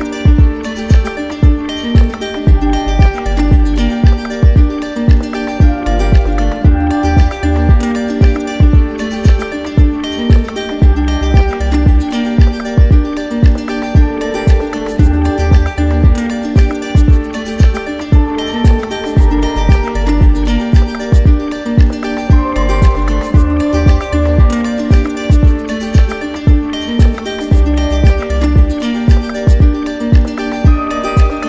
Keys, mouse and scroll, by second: 0.5 ctrl+click, 2.2 ctrl+click, 2.6 ctrl+click, 6.2 click, 6.8 ctrl+click, 8.1 click, 10.4-11.4 typing, 12.1 ctrl+click, 13.7 click, 14.1 shift+click, 15.5 alt+click, 16.5 click, 17.2 alt+click, 18.2 alt+click, 19.5 alt+click, 19.8-20.3 typing, 22.0 ctrl+click, 22.8 ctrl+click, 26.2 click, 27.1 ctrl+click, 28.3-29.4 typing, 30.7 click.